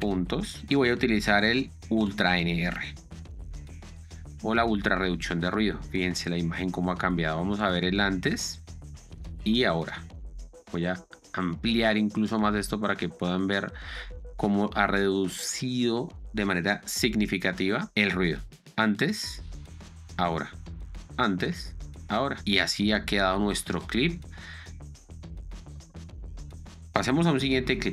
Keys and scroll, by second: 0.1 6, 0.3 Return, 8.9 ctrl+d, 18.9 ctrl+d, 21.4 ctrl+d, 22.3 ctrl+d, 22.4 z, 25.3 space, 27.4 Down.